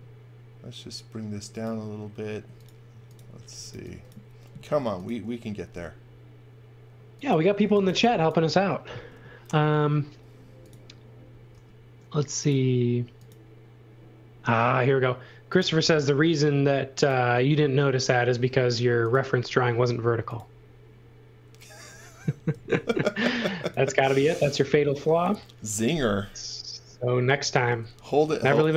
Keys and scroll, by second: 2.2-4.6 typing, 7.3-8.9 typing, 11.5 r, 15.7 space, 18.2 r, 22.5 shift+5, 27.7 shift+5, 28.3 space.